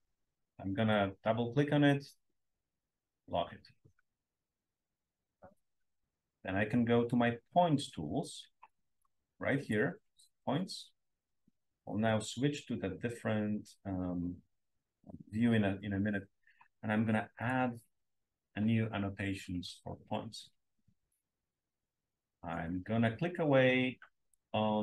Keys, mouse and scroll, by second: 0.4 click, 0.6 click, 1.8-3.5 drag, 7.0 click, 17.3 click, 22.9-23.5 scroll up 2.